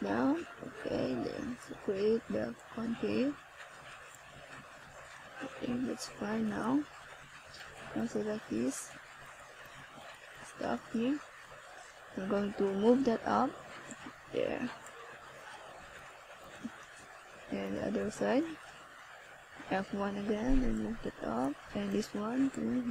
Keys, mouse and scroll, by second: 2.3 click, 3.8-4.2 scroll down 2, 4.6 click, 5.3 click, 6.7 click, 12.7-13.2 scroll down 1, 14.6-15.3 scroll up 3, 15.7 click, 17.1 click, 17.8 click, 18.9 click.